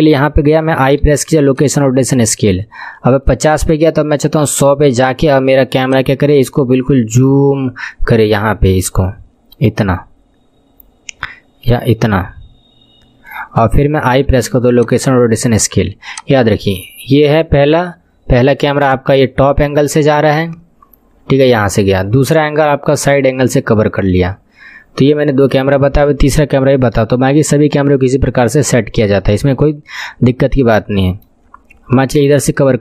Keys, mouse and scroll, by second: 1.0 i, 3.2-8.9 drag, 14.1 i, 16.1-27.2 drag, 27.2-28.8 shift+middle drag, 28.8-29.2 scroll up 3, 29.2-31.5 shift+middle drag, 31.5 scroll up 4, 32.5-32.8 middle drag.